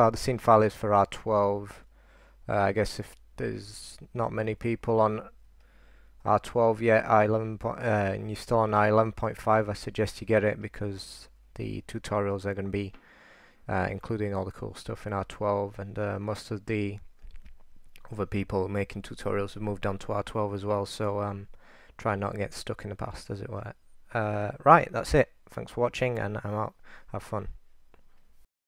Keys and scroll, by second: 2.1-2.8 typing, 4.7-11.6 typing, 13.5 typing.